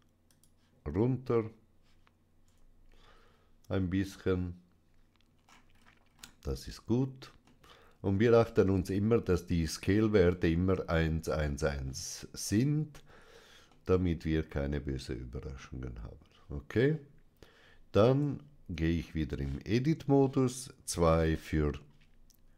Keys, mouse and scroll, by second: 0.2 click, 2.4 Tab, 5.3-6.9 scroll up 2, 7.4 middle click, 13.6-15.7 middle drag, 18.1 Tab, 21.0 2.